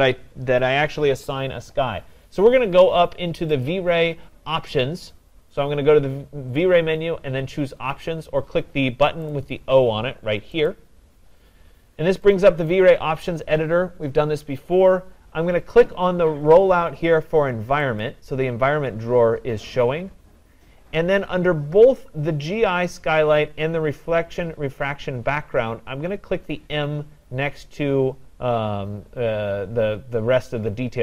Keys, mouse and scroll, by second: 3.7-5.4 drag, 9.3 click, 10.7 click, 12.7 click, 18.1 click.